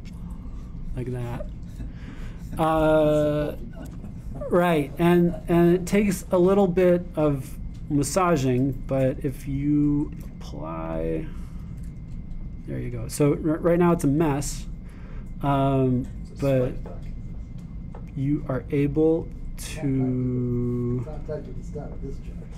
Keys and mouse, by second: 11.1-15.1 drag.